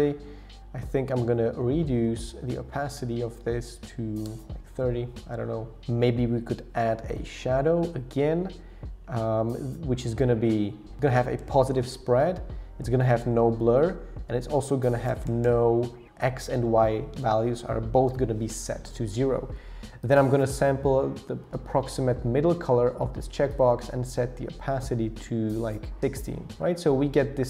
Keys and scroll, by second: 1.6 shift+Down, 2.0 shift+Down, 2.5 shift+Up, 3.0 Down, 3.1 Down, 3.3 Down, 4.3 Return, 11.4 Page_Up, 11.6 Page_Up, 11.7 Page_Up, 13.1 Down, 13.2 Down, 13.3 Down, 13.4 Page_Down, 13.8 Page_Down, 15.1 Page_Down, 15.4 Page_Down, 16.0 Return.